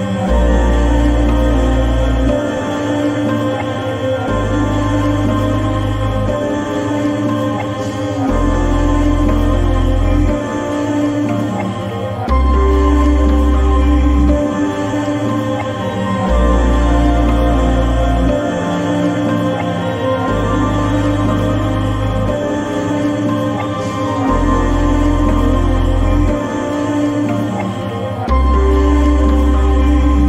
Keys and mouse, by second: 0.7 click, 2.0-2.5 shift+middle drag, 4.3-7.5 drag, 14.0-14.5 shift+middle drag, 15.2-16.9 right drag, 19.3 ctrl+z, 20.3 shift+middle click, 21.0-21.9 right drag, 23.4 Escape, 25.6-26.1 drag, 28.3 click, 28.8 click, 29.5-30.2 drag.